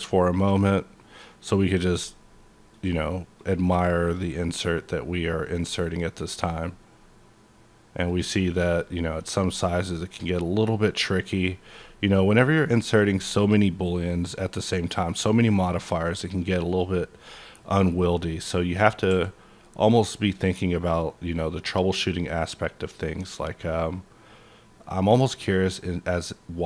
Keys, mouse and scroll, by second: 0.0-0.7 scroll down 1, 0.7-1.1 scroll down 2, 1.1-1.8 scroll up 1, 1.8 click, 2.6 click, 3.4 click, 4.5 click, 5.0-8.1 scroll down 12, 8.1 click, 8.6 click, 9.5 click, 10.6-11.5 scroll down 8, 11.9-12.2 scroll up 3, 12.9-13.8 scroll up 7, 13.8-14.5 scroll up 2, 14.5-15.0 scroll up 1, 15.0 scroll up 1, 16.7 click, 17.0 scroll down 1, 17.2 middle click, 17.6-18.3 scroll up 1, 18.3-21.3 middle drag, 19.1 s.